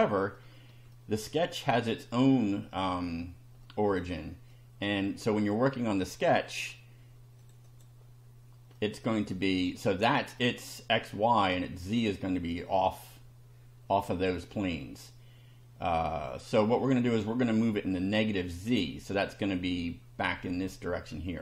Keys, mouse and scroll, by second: 0.4 shift+middle click, 3.6 middle click, 4.5-5.2 middle drag, 6.1 click, 7.4 click, 8.7-9.8 middle drag, 9.9-10.6 middle drag, 16.5 middle click, 17.4-18.1 middle drag, 18.3-18.9 middle drag.